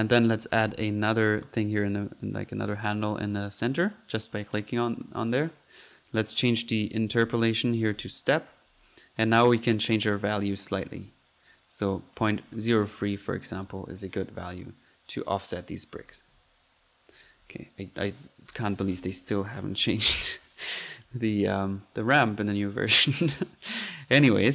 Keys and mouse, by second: 0.6 click, 1.2 click, 2.7 click, 3.8 click, 7.2 click, 8.0 click, 9.7 click, 11.5 drag, 11.9-12.8 drag, 15.2 click, 15.9 click, 16.5 ctrl+z, 16.9-17.8 typing, 17.7 ctrl+click, 21.7 click, 23.3 click, 24.1 middle click.